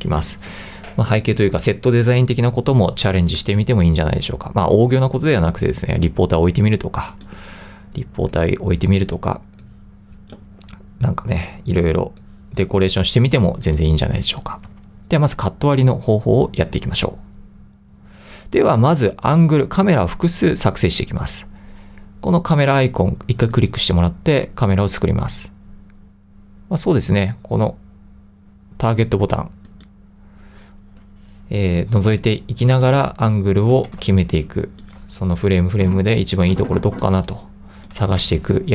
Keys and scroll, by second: 14.7 super+x, 32.2 2, 33.1 3, 34.2 1, 37.2 3, 38.4-38.7 typing.